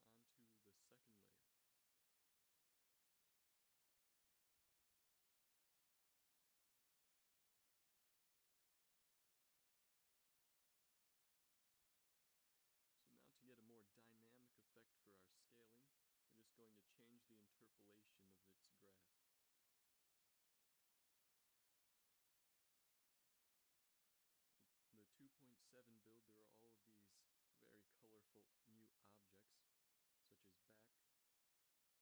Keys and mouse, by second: 4.7 ctrl+s, 10.4-11.2 drag, 11.9 KP_7, 18.8 middle click, 19.5 middle click, 23.6 a, 24.1 a, 25.3 t, 31.9 shift+Left.